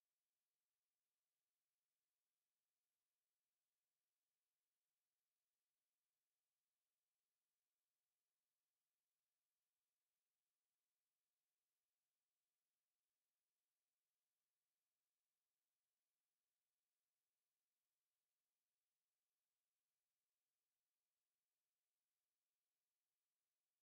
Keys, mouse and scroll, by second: 0.0 Tab, 2.0 middle click, 6.7 1, 8.3 click, 11.2 2, 13.6 shift+click, 14.2 shift+click, 16.1 click, 20.1 shift+right click, 20.6 shift+click.